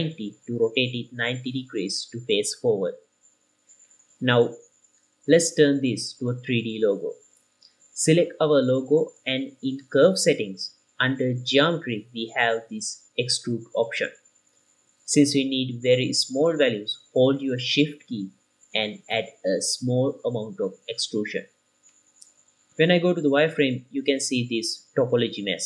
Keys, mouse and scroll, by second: 1.0 KP_9, 1.0 KP_0, 2.8 KP_0, 2.8 KP_9, 3.3-4.5 drag, 6.5-8.4 middle drag, 6.5-6.8 scroll down 2, 8.4 click, 8.9 click, 9.7 click, 10.3 middle click, 10.6-10.9 scroll up 2, 10.9 click, 12.4 click, 15.9-17.7 shift+drag, 21.7-22.7 middle drag, 23.1 z, 24.0 click, 24.3-24.7 scroll down 2, 24.6-25.6 middle drag.